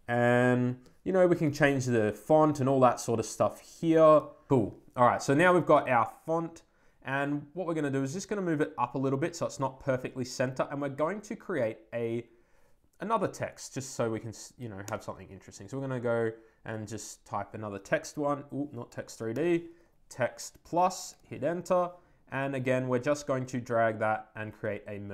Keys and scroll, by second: 17.1 Return, 18.8 BackSpace, 20.6 Down, 21.0 Return.